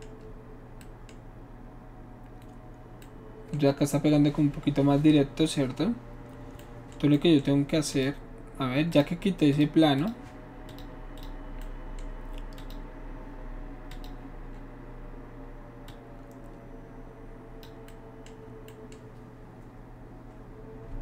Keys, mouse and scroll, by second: 7.9 click, 8.9 click, 9.6 click, 10.0 click, 10.7 click, 11.2 click, 12.6 click, 13.9 click, 15.9-17.7 drag.